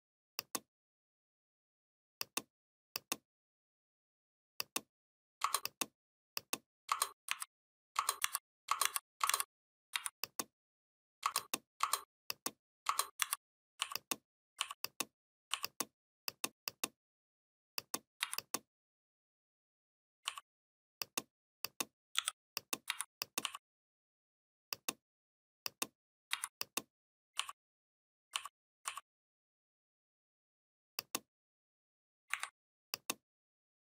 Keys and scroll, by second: 7.1-9.7 typing, 13.0 shift+m, 18.0 v, 22.0 i, 22.7 v, 26.2 v, 32.1 Delete.